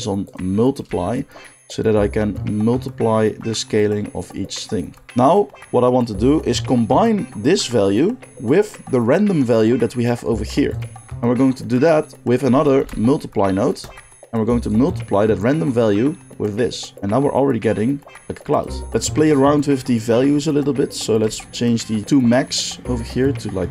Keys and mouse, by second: 10.8-14.6 middle drag, 12.7 shift+d, 14.6-18.8 drag, 18.8-21.5 middle drag, 21.5-23.7 shift+drag.